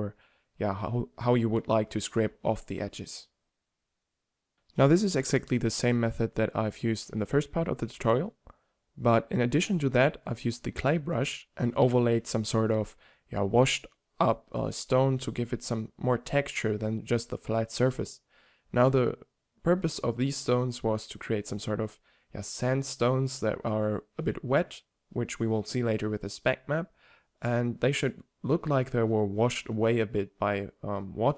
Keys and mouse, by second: 1.8 middle drag, 2.8-8.3 middle drag, 8.6-13.8 middle drag, 16.7-17.5 drag, 17.5-19.4 middle drag, 19.4-22.2 drag, 22.2 middle click, 22.6 middle drag, 22.8-24.0 middle drag, 27.7-30.8 drag, 30.8-31.3 middle drag.